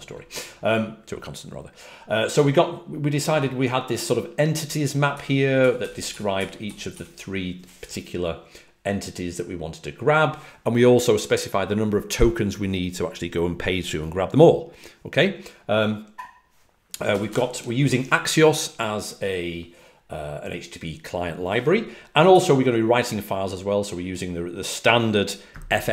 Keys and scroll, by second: 2.2 typing, 4.8-7.3 typing, 17.0 typing, 22.2 typing.